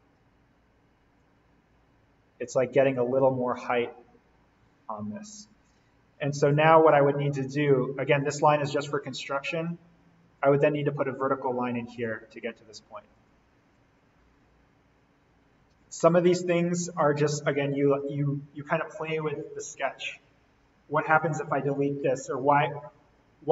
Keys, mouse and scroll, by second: 1.1-3.7 drag, 3.7-4.2 scroll up 1, 4.2 scroll down 1, 4.9-5.3 scroll up 1, 5.3 scroll down 1, 6.9 click, 7.2-8.1 scroll down 1, 8.1 click, 9.5 l, 13.8 Escape, 14.4-15.2 scroll up 1, 15.7 d, 16.5 click, 21.7 Escape, 23.1 scroll up 1.